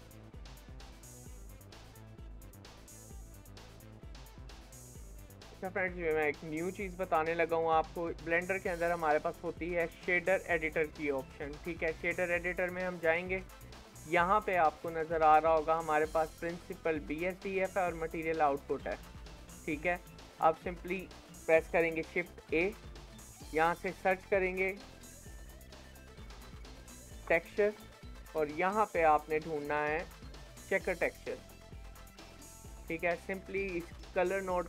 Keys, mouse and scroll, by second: 0.2-0.5 scroll up 3, 0.5 shift+middle click, 1.4 scroll down 3, 1.7-4.6 shift+middle drag, 4.6 click, 5.3-8.1 shift+middle drag, 8.1-13.8 drag, 14.4 click, 14.7-15.7 scroll up 16, 15.7-18.6 middle drag, 18.6 scroll down 1, 18.9 middle click, 19.5-19.9 scroll down 3, 19.9 middle click, 20.8-22.4 drag, 22.4 shift+a, 34.0-34.6 drag.